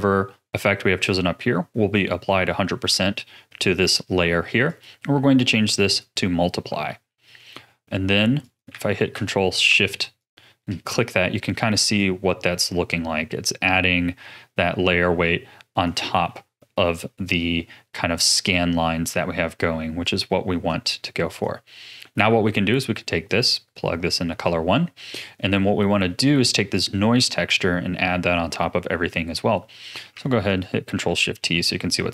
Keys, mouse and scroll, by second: 4.6-6.5 drag, 6.5-8.4 middle drag, 8.4 click, 10.2 ctrl+shift+click, 11.4-11.9 middle drag, 11.9-15.0 drag, 16.2-20.0 middle drag, 20.0 click, 20.9 click, 21.6-23.2 middle drag, 23.2 click, 24.7-27.6 middle drag, 27.6 click, 29.5-30.4 middle drag, 30.4 ctrl+shift+click, 31.4-32.1 middle drag.